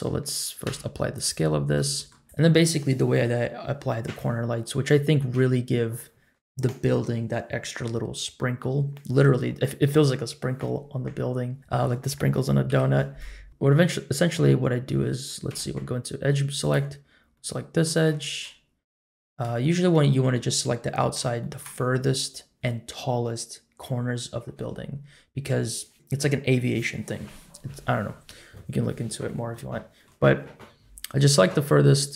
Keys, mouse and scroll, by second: 0.6 ctrl+a, 1.5 scroll down 1, 1.8 middle drag, 2.2 click, 2.2 scroll up 2, 2.8-3.5 scroll down 1, 4.3 Tab, 5.3 1, 11.6 click, 12.7 KP_Decimal, 13.3-14.2 scroll down 12, 15.5 2, 16.5 alt+click, 17.3 middle click, 18.6-19.1 scroll down 1, 19.1 middle click, 19.6 shift+middle click, 20.4-20.9 scroll down 1, 20.9 middle click, 20.9 scroll down 1, 21.4 shift+middle click, 29.5 middle click, 31.8-32.1 middle drag.